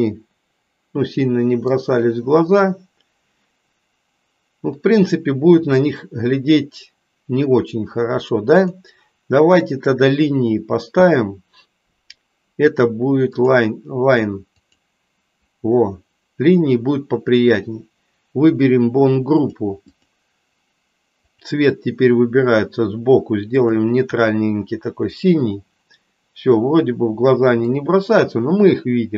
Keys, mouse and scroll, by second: 8.6-13.6 drag, 14.6 click, 18.4 click, 19.4 click, 19.8 click, 21.2-23.9 drag, 25.2 click, 26.6-27.6 middle drag.